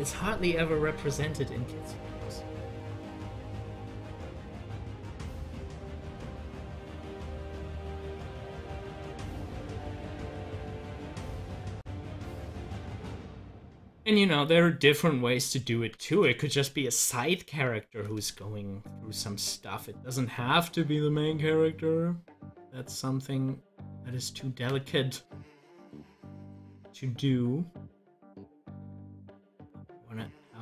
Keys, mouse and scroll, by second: 5.1 click, 7.1 ctrl+z, 28.9 ctrl+z.